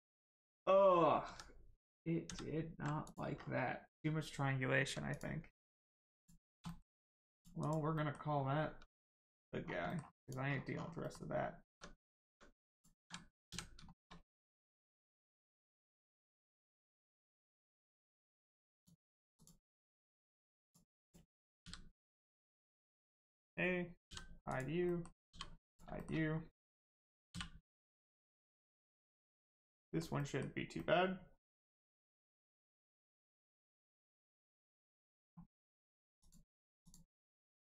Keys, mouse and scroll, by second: 0.3 scroll up 1, 1.2 ctrl+z, 3.0 click, 3.7 scroll down 1, 3.8 Caps_Lock, 5.0 click, 5.3 Tab, 6.1 click, 6.4 scroll down 1, 6.6 shift+middle click, 6.9 middle click, 7.3 click, 7.9 middle click, 8.3 scroll up 1, 8.6 Tab, 9.0 middle click, 9.6 scroll down 1, 9.8 middle click, 10.2 click, 10.4 scroll down 1, 11.0 middle click, 11.6 Tab, 12.0 middle click, 12.2 Tab, 12.7 click, 13.0 scroll up 1, 13.4 a, 15.3 click, 18.7 click, 19.9 Tab, 20.2 middle click, 20.6 click, 22.2 middle click, 22.6-24.0 scroll down 1, 24.0 h, 24.4 click, 24.8 middle click, 25.2 h, 25.6 click, 25.9 shift+middle click, 26.2 scroll up 1, 27.7 middle click, 28.1-28.7 scroll down 1, 28.8 middle click, 31.8 middle click, 32.4 Tab, 32.7 middle click, 33.8 Tab, 34.1 middle click, 35.8 click.